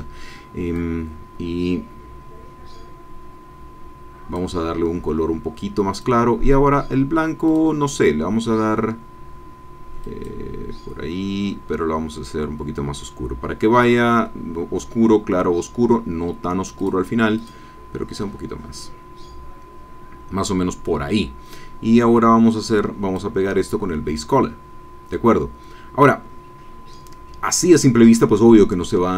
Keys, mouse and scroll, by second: 0.7-4.5 drag, 5.9 click, 7.5 click, 10.0 click, 11.3-12.1 scroll down 2, 16.7 click, 17.4 click, 18.1-18.7 scroll down 2, 18.8-19.4 scroll down 2, 21.9-23.3 drag, 28.5 click.